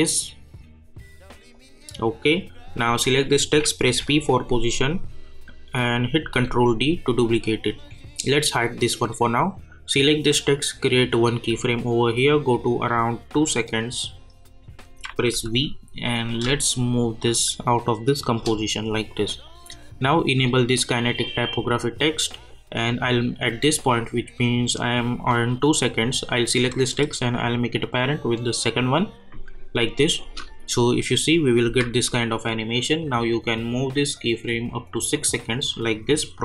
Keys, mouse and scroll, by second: 3.9 p, 6.2 ctrl+d, 8.7 click, 14.0 click, 15.3 v, 16.3-19.1 drag, 19.1-23.3 drag, 26.9-30.2 drag, 30.2 space, 33.0-36.4 drag.